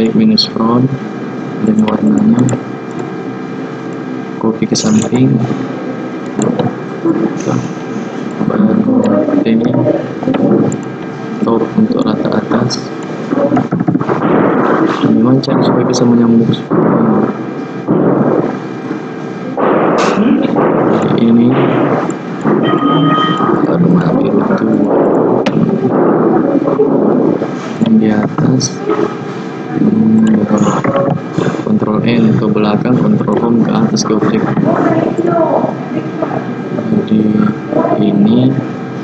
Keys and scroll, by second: 28.3 ctrl+Home, 30.9 ctrl+End.